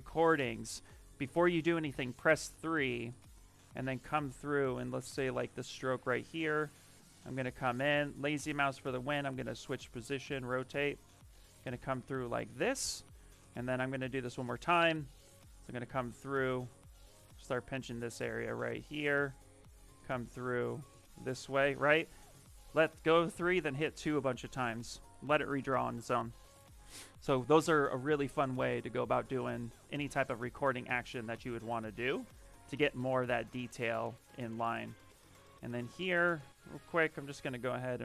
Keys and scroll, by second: 1.8 3, 22.2 3, 35.2-36.1 typing.